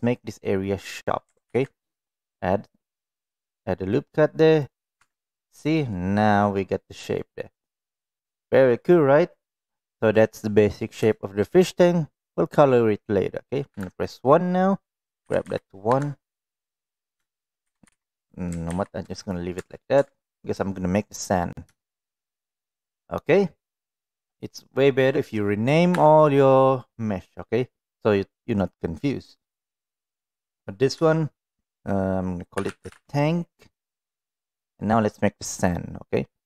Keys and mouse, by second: 1.4 ctrl+r, 5.0 Tab, 5.5 click, 5.9-6.7 middle drag, 7.2-7.8 middle drag, 8.3-8.8 middle drag, 11.2 shift+middle drag, 11.5 middle click, 13.7 KP_1, 14.8 click, 15.3 g, 17.3 shift+middle click, 17.6 g, 18.7 ctrl+z, 19.2 click, 19.7 Tab, 20.0 Tab, 21.8 shift+middle click, 24.0 click, 24.5-34.1 drag, 34.6 drag.